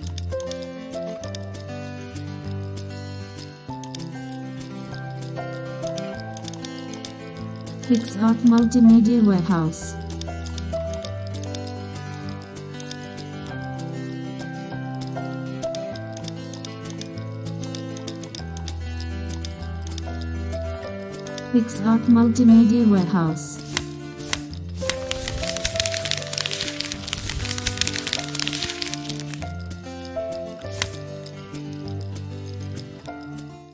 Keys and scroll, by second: 2.1 super+c, 2.3 super+n, 3.4 super+w, 4.0 super+c, 4.8 super+v, 5.3 alt+shift+super+f, 6.1 super+d, 21.5 super+0.